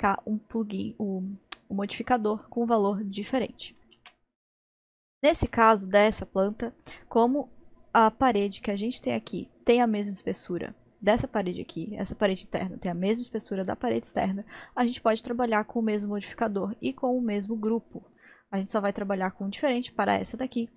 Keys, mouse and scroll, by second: 4.0 ctrl+z, 5.5-8.3 middle drag, 8.3-13.7 drag, 17.7-19.4 middle drag, 19.4-20.7 drag.